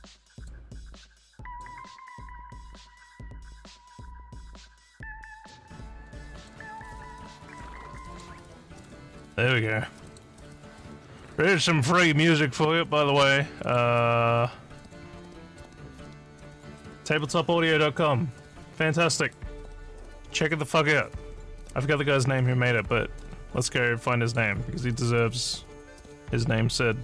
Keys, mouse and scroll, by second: 0.3 click, 1.4 click, 5.3 click, 6.3 click, 8.0 click, 10.1 click, 13.6 click, 15.5 click, 21.7-22.2 scroll down 6, 22.2 scroll up 1, 23.2-24.3 drag.